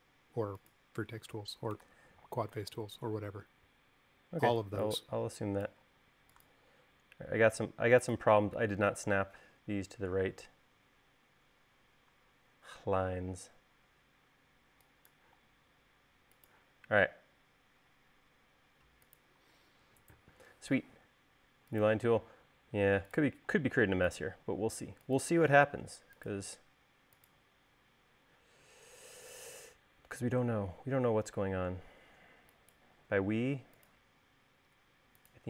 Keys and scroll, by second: 1.6 e, 2.2 super+z, 6.2 l, 8.8 l, 14.1 e, 15.5 l, 23.7 l.